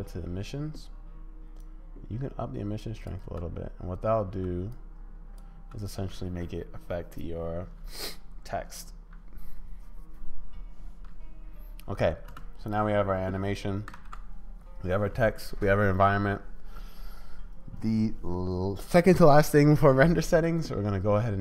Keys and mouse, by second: 1.6-3.1 drag, 3.2 space, 4.4 space, 4.9 click, 5.6 space, 12.6 space, 13.9 ctrl+s.